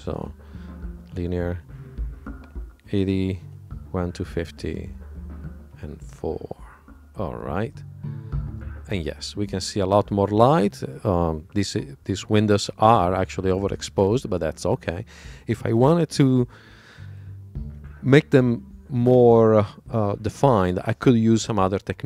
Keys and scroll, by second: 4.2 super+Tab.